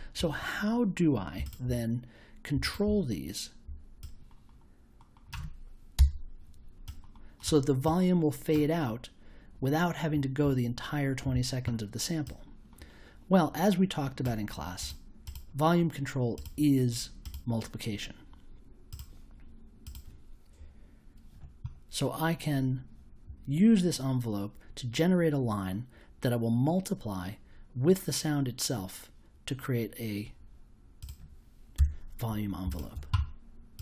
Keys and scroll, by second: 5.9 BackSpace, 31.7 BackSpace.